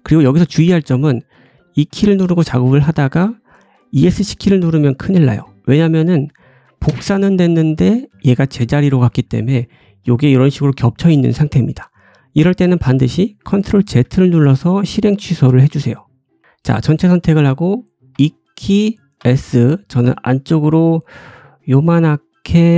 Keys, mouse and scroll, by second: 0.9-5.0 drag, 5.0-18.1 right drag, 9.6 g, 13.9 ctrl+z, 15.3-16.4 drag, 15.3-16.4 middle drag, 15.7 g, 16.4 a, 18.1-21.1 drag, 18.1 e, 21.1-22.7 right drag.